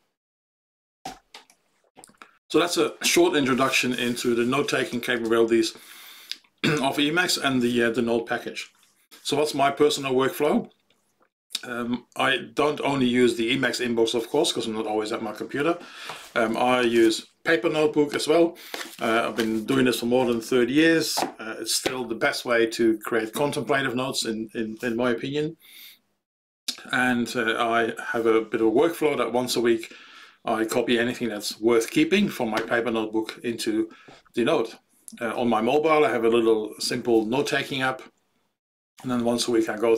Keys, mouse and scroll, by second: 1.0 ctrl+g.